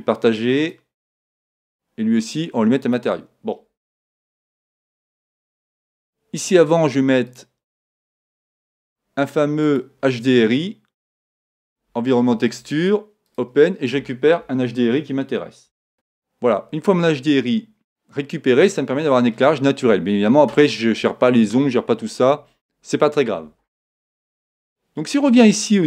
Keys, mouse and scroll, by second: 0.0-1.6 drag, 1.6 right click, 2.5 right click, 2.8-4.6 drag, 7.3-11.4 drag, 13.3 click, 15.9-16.9 drag.